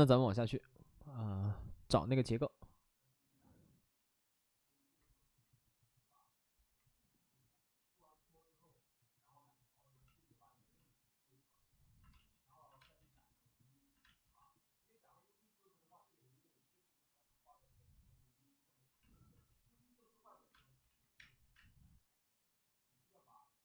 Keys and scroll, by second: 12.1 space, 12.8 space, 14.0 space, 20.5 space, 20.8 ctrl+z, 21.1 space, 21.5 space.